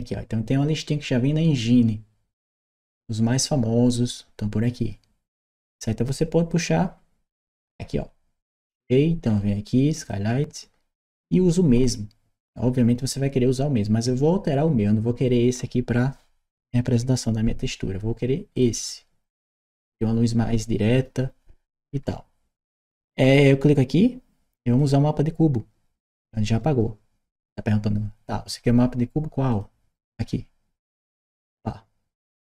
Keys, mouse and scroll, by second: 9.8 click, 23.3 click, 24.6 click, 29.3 click, 31.0 click.